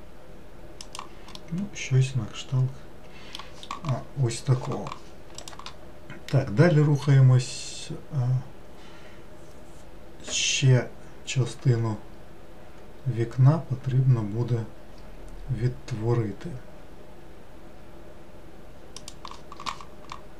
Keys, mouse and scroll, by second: 1.4-4.5 middle drag.